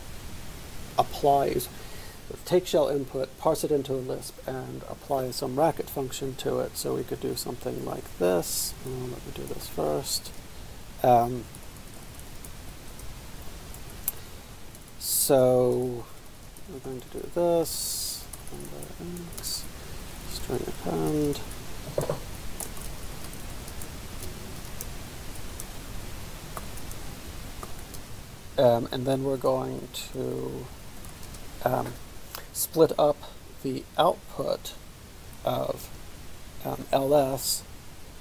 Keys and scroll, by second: 6.9-8.5 typing, 8.6 ctrl+a, 8.7 ctrl+k, 9.6-26.6 typing, 27.7-28.0 typing, 29.2-31.7 typing, 34.2-35.9 typing.